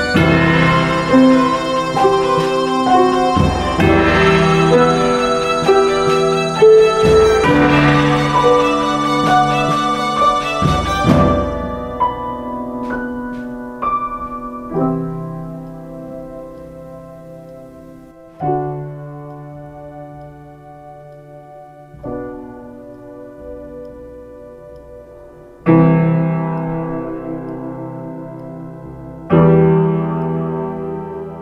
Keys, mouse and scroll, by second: 27.5 ctrl+space, 30.0 ctrl+t.